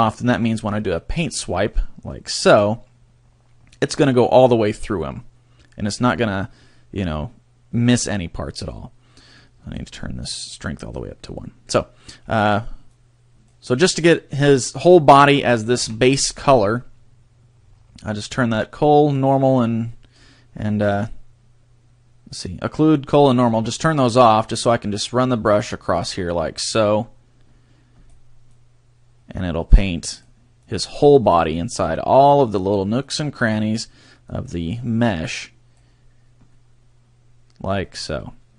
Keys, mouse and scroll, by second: 0.7 click, 3.7 middle click, 9.3 click, 10.5 click, 11.6 scroll down 1, 12.9 click, 15.8 KP_3, 16.8 click, 20.8-21.5 scroll down 4, 24.1 click, 28.7 click, 30.8 click, 32.7 click, 33.5 click, 34.4 click, 36.5 middle click.